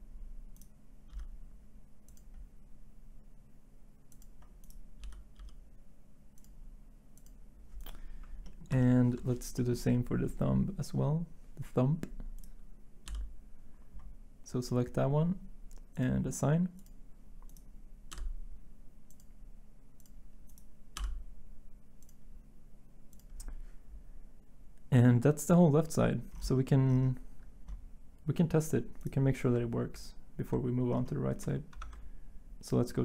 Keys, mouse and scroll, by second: 1.1 l, 4.2 l, 5.0 l, 5.4 l, 21.0 middle click, 31.7 ctrl+Tab.